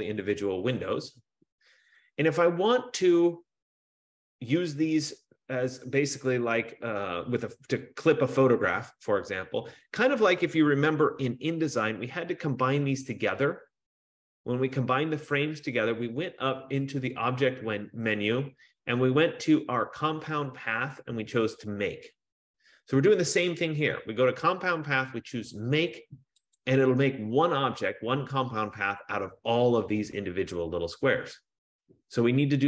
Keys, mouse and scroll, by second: 17.9 click, 19.0 F15, 26.8 click.